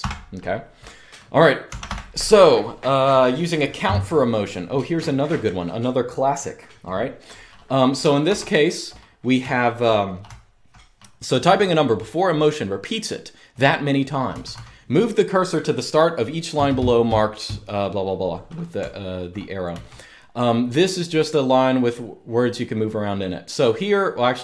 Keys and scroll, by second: 1.1-2.1 typing, 8.0 ctrl+d, 9.1-9.5 k, 10.0-10.4 j, 14.0 j, 14.2 j, 18.5-19.4 typing.